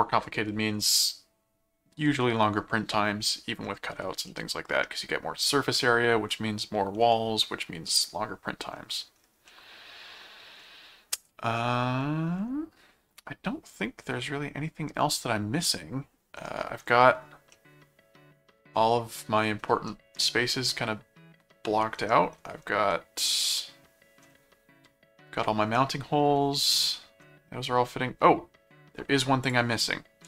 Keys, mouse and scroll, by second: 4.3 middle click, 9.5 middle click, 10.8-11.3 scroll up 4, 11.6 middle click, 11.8-12.1 scroll down 2, 13.3-16.9 middle drag, 17.5-19.4 middle drag, 19.9-22.4 middle drag, 22.9-24.2 middle drag, 25.7 middle click, 27.0 middle click, 29.4 click.